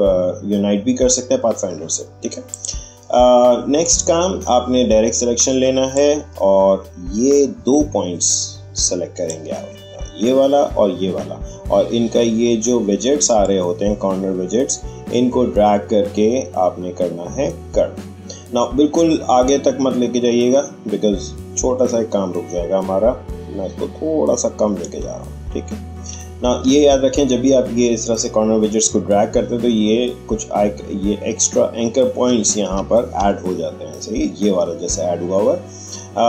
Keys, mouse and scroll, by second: 2.5 click, 5.9 click, 5.9-11.6 drag, 13.4-23.4 drag, 26.0-26.6 alt+scroll up 1, 32.2-32.7 alt+scroll up 1, 35.5-35.9 shift+scroll down 1.